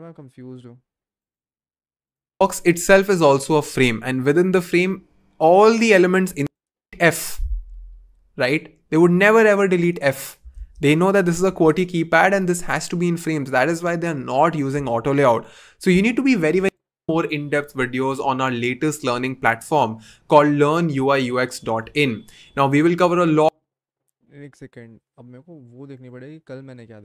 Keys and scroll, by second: 2.4 v, 6.8 BackSpace, 10.9 super+z.